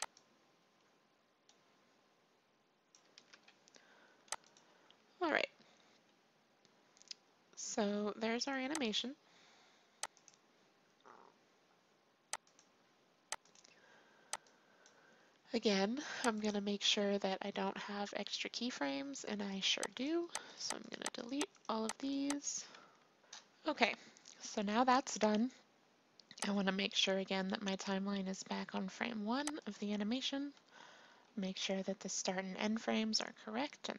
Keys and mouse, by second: 0.1-2.0 drag, 3.1 ctrl+v, 4.4-6.2 drag, 8.9-10.1 drag, 10.6-24.2 drag, 22.8 x, 26.5-28.4 drag, 29.5-33.9 drag.